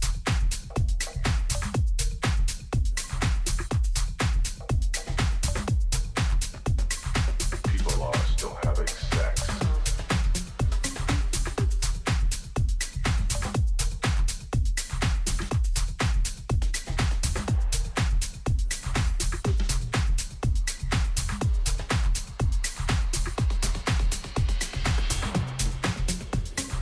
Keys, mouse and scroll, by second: 3.3-5.3 drag, 4.8 ctrl+z, 5.8 ctrl+z, 6.4 ctrl+z, 7.3-8.9 middle drag, 11.4-13.2 drag, 15.1-17.7 middle drag, 17.7 Tab, 18.3 a, 18.6 a, 20.0-21.6 drag, 23.6-25.5 middle drag, 25.8-26.8 drag.